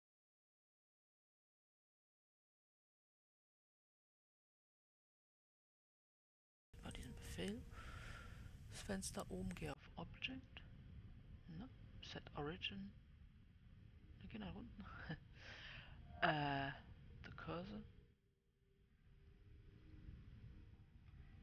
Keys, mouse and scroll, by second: 3.5-21.4 drag.